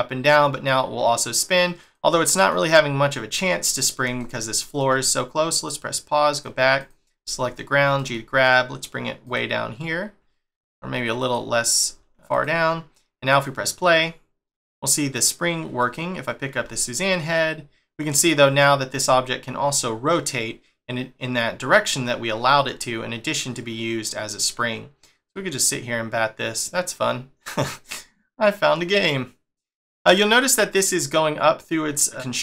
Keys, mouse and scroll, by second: 2.2 middle click, 3.1 middle click, 5.5 click, 6.3 click, 6.8 click, 7.1-7.9 scroll down 2, 7.9 g, 13.3 click, 15.8 click, 16.5 g.